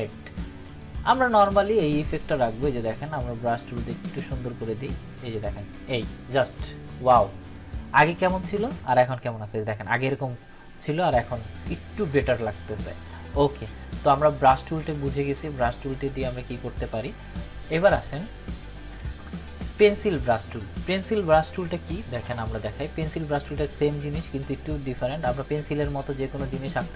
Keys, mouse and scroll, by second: 0.7-3.7 drag, 9.1 click, 14.7-15.4 click, 18.4-19.1 drag, 22.2 ctrl+=, 26.0-26.9 drag.